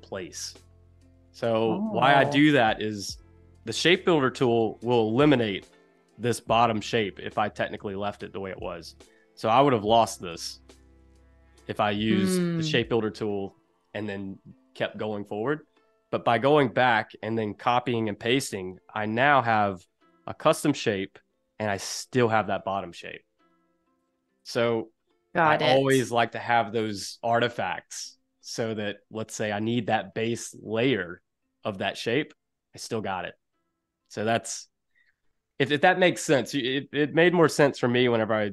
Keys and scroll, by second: 5.1 super+y, 18.5 super+y, 23.5 super+z, 24.2 super+z.